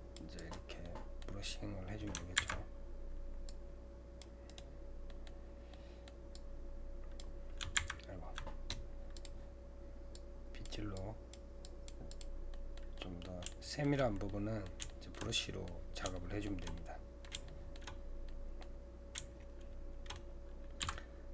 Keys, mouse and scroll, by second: 5.1-6.4 middle drag, 6.4-7.8 drag, 7.8 ctrl+z, 9.2-12.5 drag, 12.5-18.0 middle drag, 18.0 scroll down 2, 18.3-20.8 middle drag, 20.8 c.